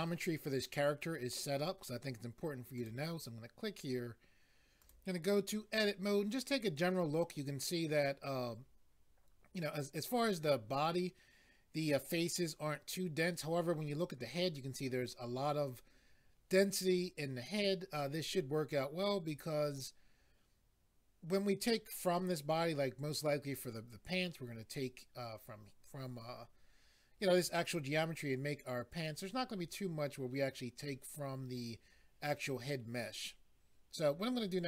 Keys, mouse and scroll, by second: 2.8 click, 4.8 click.